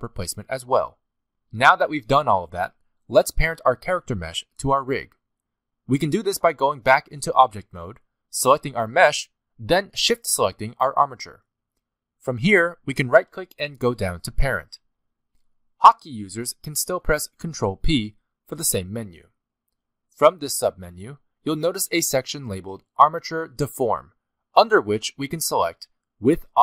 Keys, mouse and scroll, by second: 0.3 middle click, 0.3 click, 0.3 scroll up 2, 0.3-3.7 typing, 0.6 click, 1.7 click, 2.1 scroll down 8, 2.2 shift+middle click, 2.3 shift+middle click, 2.4 middle click, 2.5 shift+middle click, 2.6 middle click, 2.8 shift+middle click, 2.9 middle click, 3.0 shift+middle click, 3.1 scroll up 1, 3.2 scroll down 1, 3.3 shift+middle click, 4.3 middle click, 5.4 click, 8.2 click, 10.4 shift+click, 13.7 right click, 18.0 ctrl+p.